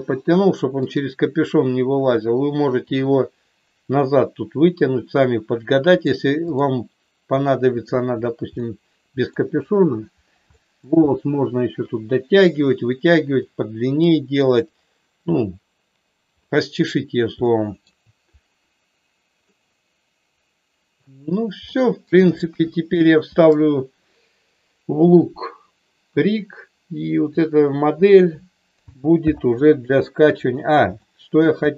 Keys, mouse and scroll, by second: 0.9-2.6 drag, 6.0 click, 7.8 click, 8.5 middle click, 10.5 middle click, 13.3-14.3 middle drag, 17.4 shift+middle click, 19.3-21.0 middle drag, 21.6 middle click, 22.5 KP_1, 27.2 click, 29.2 alt+h, 31.0 shift+middle click.